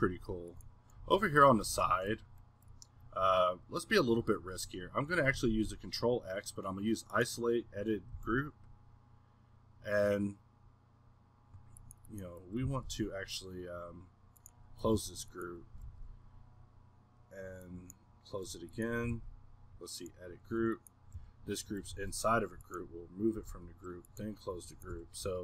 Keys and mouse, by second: 0.2 Escape, 1.0 z, 1.6 z, 2.6-4.5 middle drag, 7.6 middle click, 12.1-12.9 middle drag, 13.9-14.9 middle drag, 14.9 a, 16.8-18.5 middle drag, 18.5 a, 21.2 g, 24.7 a, 24.9 g.